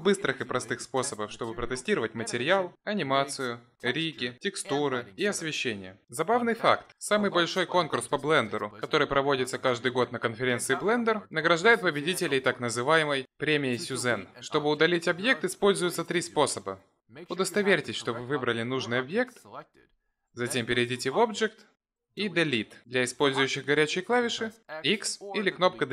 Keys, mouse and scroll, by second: 19.1 click, 20.1 click, 21.8 click, 24.1 ctrl+z, 25.4 Delete.